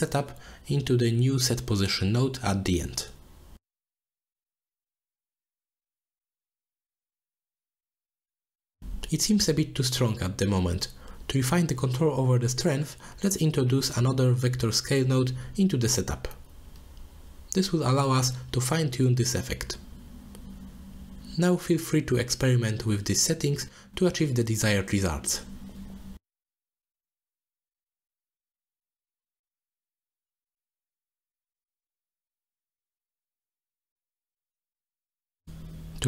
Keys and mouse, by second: 0.1 click, 0.4 click, 0.8 shift+a, 7.7-9.6 drag, 10.4-10.8 middle drag, 11.1-11.6 middle drag, 12.0 middle click, 12.7 click, 13.1 shift+d, 15.8-19.8 drag, 23.1-25.1 drag, 26.8 middle click, 29.1 click, 30.9-31.9 drag, 32.2-33.2 drag, 32.6 3, 33.2 middle click, 33.6-34.3 middle drag.